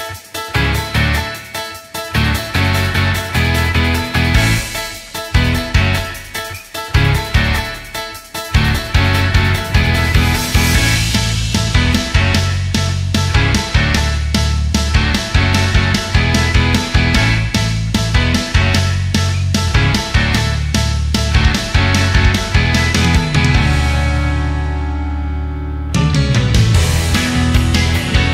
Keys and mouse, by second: 0.0-4.4 drag, 6.7 ctrl+z, 10.0 drag, 10.6-15.9 drag, 18.3-21.7 drag, 25.2-25.8 middle drag.